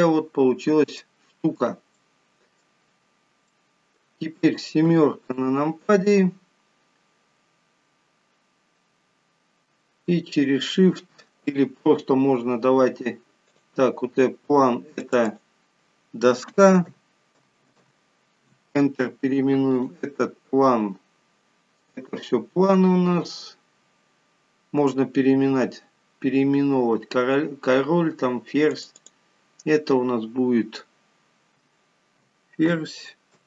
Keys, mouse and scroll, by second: 0.1-0.7 scroll up 3, 0.8 scroll down 1, 1.4 shift+middle click, 2.3 middle click, 3.4-4.0 scroll down 3, 3.9 middle click, 5.2 KP_7, 6.3-6.9 scroll down 2, 13.9 click, 15.4 click, 15.7 click, 20.1 click, 29.1 click, 29.4 click.